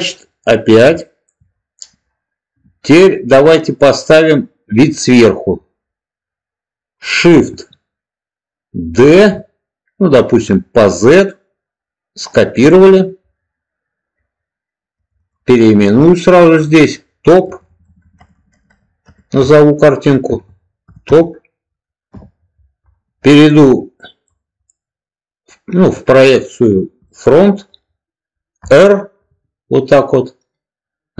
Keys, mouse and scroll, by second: 0.9 shift+middle click, 8.9 shift+d, 10.7 z, 12.4 click, 14.9 click, 15.1-22.5 drag, 17.6 BackSpace, 23.4-24.2 middle drag, 24.6-27.2 middle drag, 28.5 r.